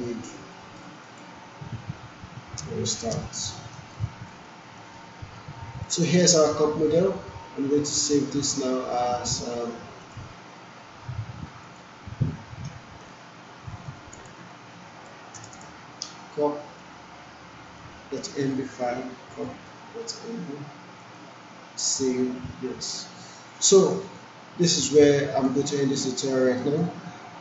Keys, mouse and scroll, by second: 0.6 alt+middle click, 1.0 click, 2.6 space, 3.9-4.8 alt+click, 4.5 alt+right click, 5.9 ctrl+alt+s, 10.0 alt+click, 12.0 alt+s, 12.2 alt+c, 13.7 alt+BackSpace, 14.0 alt+c, 14.2 alt+e, 14.7 alt+n, 14.8 alt+e, 15.1 alt+s, 15.4 alt+Return, 17.7 alt+click, 18.6 alt+shift+c, 19.1 alt+u, 19.4 alt+p, 21.0 alt+click, 24.2-25.6 alt+click, 25.0 alt+click, 25.8-26.4 alt+middle click, 26.8-27.4 alt+drag.